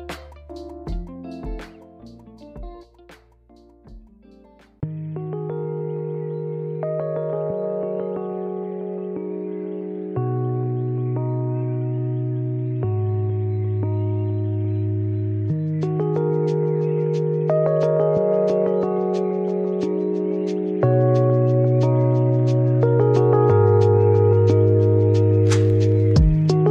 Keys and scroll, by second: 13.1 shift+d, 15.3 y, 20.2 shift+r.